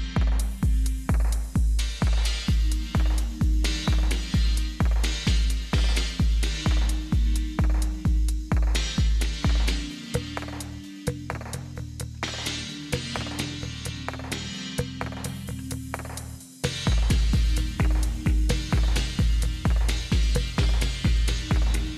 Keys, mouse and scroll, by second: 12.7 y, 15.1-15.8 typing, 16.9 Down, 19.1 space, 19.8 Up, 21.8-21.9 typing.